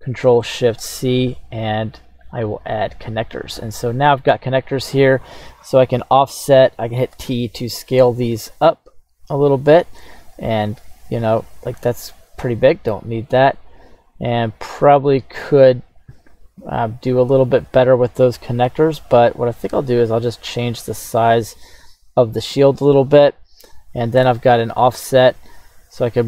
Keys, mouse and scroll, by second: 0.5 alt+shift+c, 7.2 t, 18.2 click, 24.4 d.